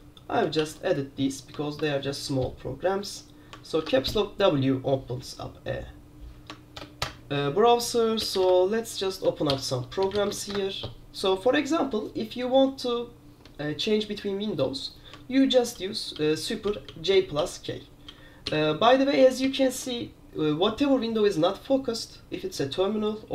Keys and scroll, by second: 0.7 super+q, 1.8 super+q, 3.9 super+w, 6.9 super+Return, 7.1 super+Return, 8.3-10.8 typing, 9.6 super+j, 15.6 super+j, 15.8 super+j, 16.7 super+k, 17.0 super+k, 17.5 super+k, 18.2 super+j, 18.6 super+k, 19.3 super+j, 19.7 super+k.